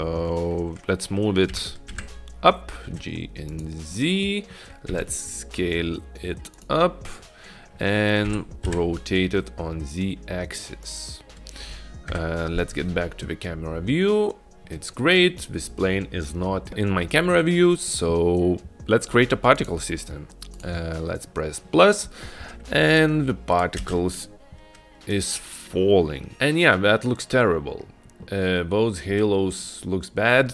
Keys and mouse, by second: 1.6 g, 4.0-4.6 middle drag, 5.0 s, 8.3 r, 12.2 KP_0, 23.3 click, 24.2 space.